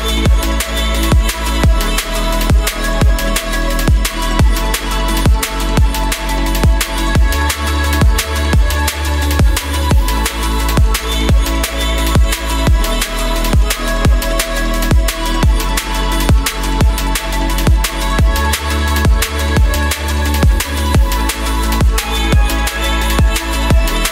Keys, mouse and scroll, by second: 0.4-1.9 middle drag, 1.9 click, 3.1 click, 4.0 middle click, 4.4 middle click, 4.7 click, 5.7 click, 7.7 click, 8.7 typing, 9.1 middle drag, 10.3-12.1 drag, 12.5 click, 13.2-14.8 drag, 15.8 click, 16.4 middle click, 17.0 middle drag, 17.2 click, 17.7-18.3 middle drag, 18.3 click, 18.6 middle click, 19.5 click, 20.6 click, 20.8 click, 21.9 click, 23.3 click, 23.8 middle click.